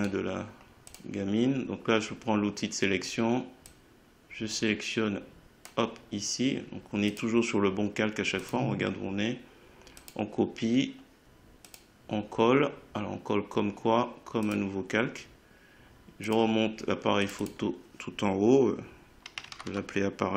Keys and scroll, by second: 19.1-20.3 typing.